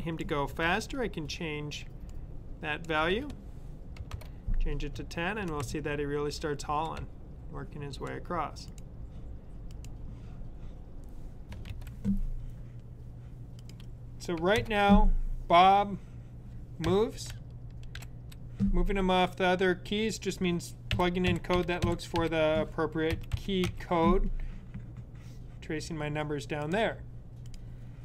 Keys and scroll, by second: 0.4-1.1 typing, 2.6-3.5 typing, 4.8 Left, 16.7 Left, 17.8 Up, 20.8 Up, 21.2 Down, 21.4 Up, 21.7 Down, 22.0 Up, 22.7-24.1 typing.